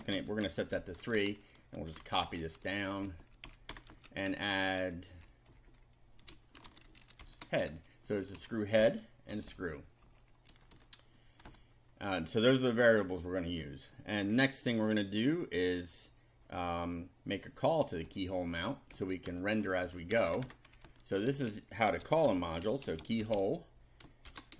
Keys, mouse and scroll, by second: 0.0-1.2 typing, 1.9 ctrl+c, 2.0 ctrl+End, 2.2 ctrl+Return, 2.8 ctrl+Up, 3.4 ctrl+End, 3.7 ctrl+Return, 3.9 ctrl+v, 4.3 ctrl+Left, 5.5 Right, 6.4-7.7 typing, 8.1 End, 8.4 Left, 8.8 BackSpace, 9.3 6, 10.0 End, 10.5 Return, 11.5 BackSpace, 18.0 Up, 19.8 Home, 20.1 Return, 20.7 Up, 21.7-24.5 typing.